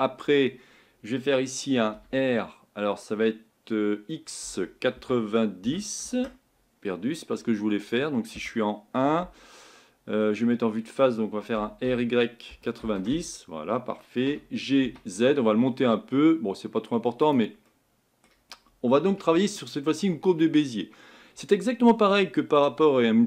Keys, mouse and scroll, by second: 17.7 middle click, 18.6 scroll down 3, 19.4-23.2 shift+middle drag.